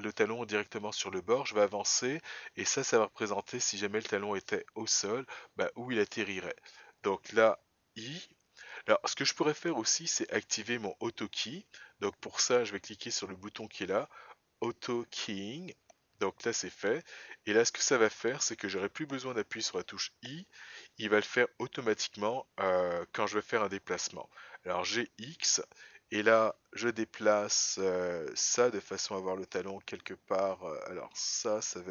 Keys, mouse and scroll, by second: 15.6 click, 17.7 click, 24.7 g.